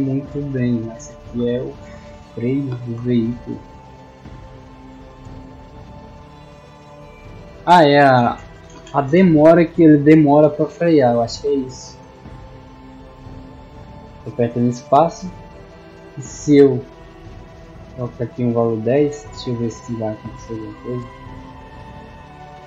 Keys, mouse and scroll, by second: 3.1-5.2 typing, 8.1-9.0 typing, 10.1 w, 11.0 d, 11.8 space, 19.5-21.0 typing.